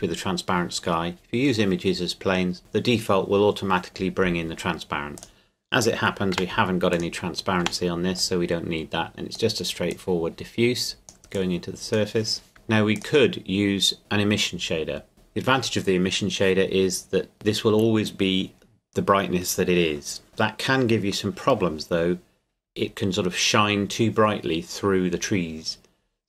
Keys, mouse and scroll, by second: 5.2 click, 6.3 Delete, 6.9 click, 7.6 Delete, 8.2 click, 12.5 scroll up 1, 12.9 click.